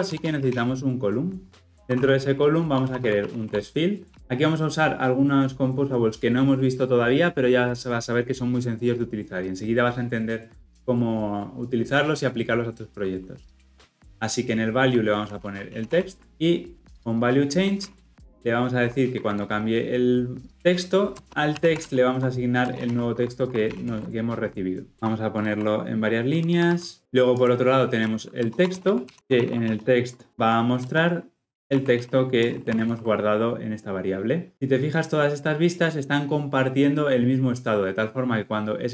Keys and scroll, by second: 16.2 Return, 23.1 Escape, 23.7 ctrl+alt+l, 23.8 ctrl+alt+o, 25.4 alt+Return, 32.4 Return, 32.8 ctrl+alt+o.